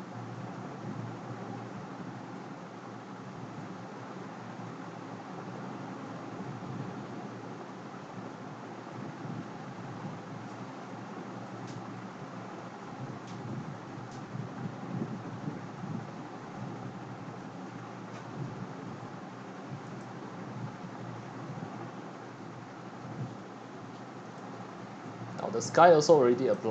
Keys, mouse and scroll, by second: 20.9-21.4 drag, 24.3-26.6 typing.